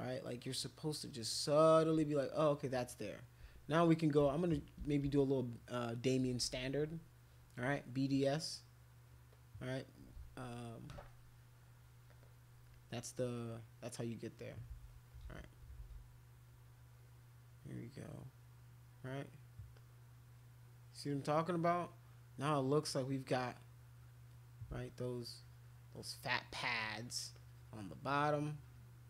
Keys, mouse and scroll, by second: 0.2 shift+click, 1.3 shift+click, 2.1 click, 4.2-6.7 typing, 8.3 click, 13.4 click, 14.7 ctrl+z, 15.2 ctrl+z, 15.8 ctrl+z, 16.4 click, 17.8 click, 18.9 click, 19.7-21.8 drag, 22.6 click, 23.7 click, 24.9 shift+click, 25.2 shift+click, 26.4 shift+click, 26.7 shift+click, 27.3 shift+click, 27.8 shift+click, 28.4 shift+click.